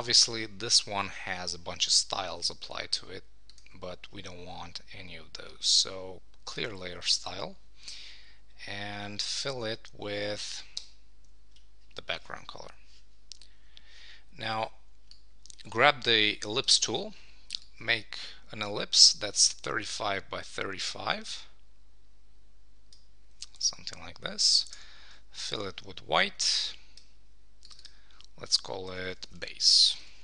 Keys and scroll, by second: 10.8 alt+BackSpace, 23.5 Return, 24.6 super+BackSpace, 29.3 Return.